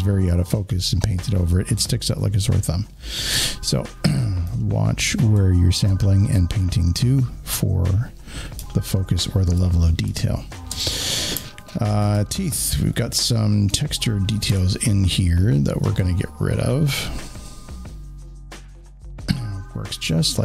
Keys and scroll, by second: 3.2 ctrl+alt+z, 4.4 space, 4.5 space, 8.5 alt+space, 12.0 alt+z.